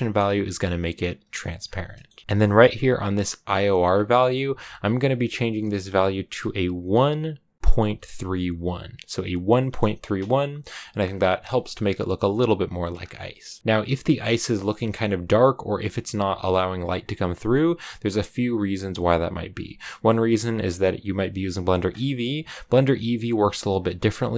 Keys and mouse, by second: 1.8 click, 2.2 BackSpace, 3.9-10.2 drag, 11.1 click, 13.0 click, 20.9-22.1 drag.